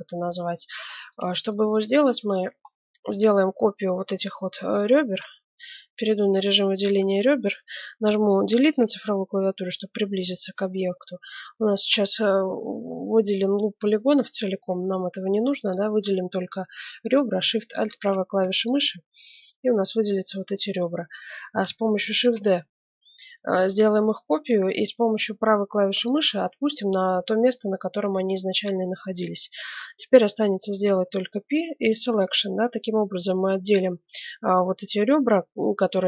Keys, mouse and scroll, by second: 5.0 ctrl+Tab, 6.0-8.2 middle drag, 8.6 KP_Decimal, 9.5-11.5 middle drag, 13.8 z, 15.6-17.4 right drag, 17.8-20.2 right drag, 20.2-22.7 middle drag, 22.2 shift+d, 31.0 p.